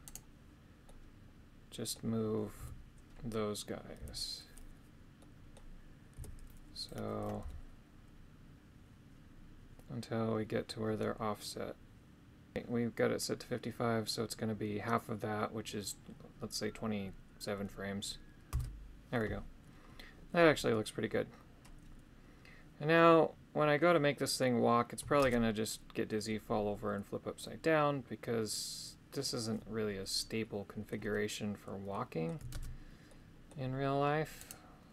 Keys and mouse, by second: 0.1 right click, 0.9-2.0 middle drag, 2.6 a, 4.0 KP_3, 5.2 middle click, 6.2 KP_3, 7.4 g, 12.6 g, 18.6 Return, 25.2 shift+space, 27.4-30.9 middle drag, 31.9 middle click, 32.5 shift+space, 33.1 middle click, 34.4 right click.